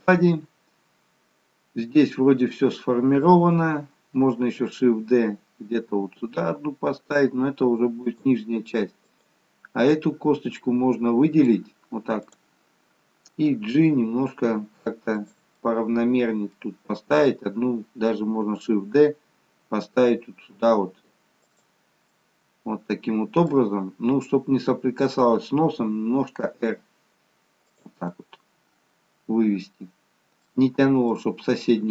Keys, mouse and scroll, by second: 4.5 shift+d, 9.1 click, 10.0 middle click, 12.3 click, 13.7 g, 15.7 middle click, 22.1 middle click, 28.1 middle click.